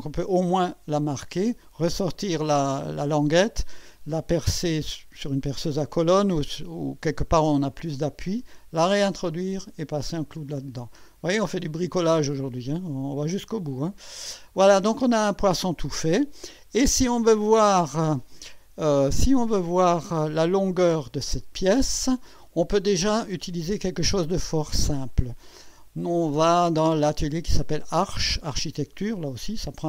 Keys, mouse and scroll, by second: 9.3 click, 10.5 click, 11.7-12.0 scroll down 2, 12.2-13.6 drag, 13.8 scroll up 1, 14.5-17.2 drag, 19.1 click, 19.5 space, 20.1 click, 21.4 right click, 22.3 scroll up 1, 24.8 click, 28.3 click.